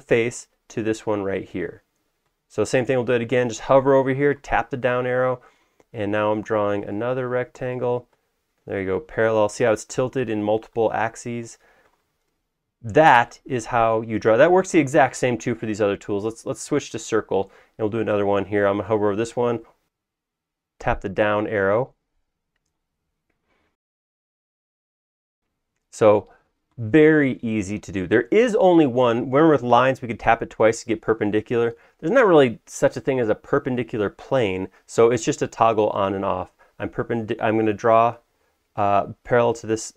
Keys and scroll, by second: 4.9 Down, 6.9 Down, 20.2 Down, 30.2 Down, 30.6 Down, 32.0 Down, 35.6 Down, 35.6 Down, 36.1 Down, 36.6 Down.